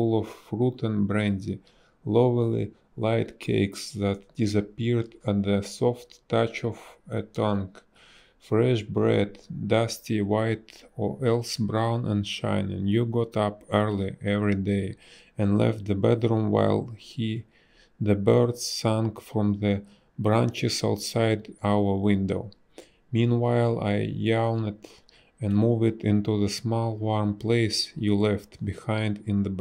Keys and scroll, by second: 0.7 a, 0.9 space, 6.3 space, 10.9 space, 16.5 space, 17.5 space, 18.3 b, 18.8 space.